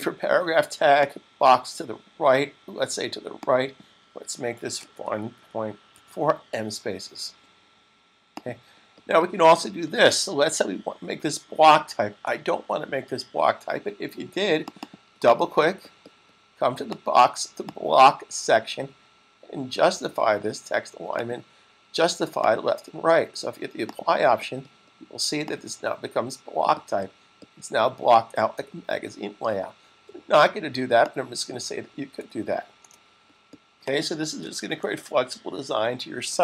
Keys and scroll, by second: 4.6-5.8 typing, 12.3 super+s, 34.5 s.